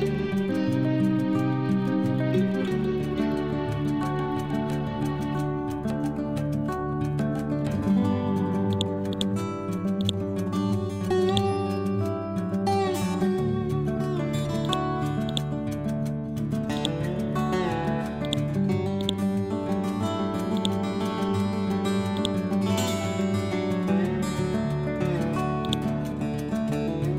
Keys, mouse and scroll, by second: 0.0-2.7 typing, 3.9 shift+0, 5.1-5.6 scroll down 1, 8.0-8.3 scroll up 1, 8.6-11.2 drag, 11.6-12.9 typing, 13.0 Return, 14.5-18.1 drag, 18.7 c, 18.9-25.5 drag, 26.0-26.7 typing.